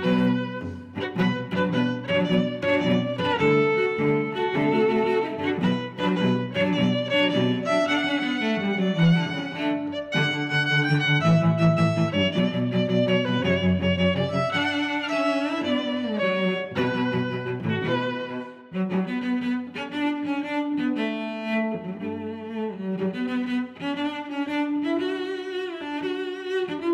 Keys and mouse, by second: 0.6 click, 1.1 click, 1.7 click, 3.0 click, 5.5 middle click, 6.8 click, 7.4 click, 8.3 click, 9.1 middle click, 10.5 click, 11.7 click, 12.0 middle click, 13.8 shift+super+Tab, 14.3 s, 14.8 x, 16.6 click, 17.3 s, 17.5 y, 18.3 click, 18.7 middle click, 19.6 middle click, 19.9 g, 20.1 z, 24.9 click, 25.1 middle click, 26.1 2, 26.5 click, 26.8 click.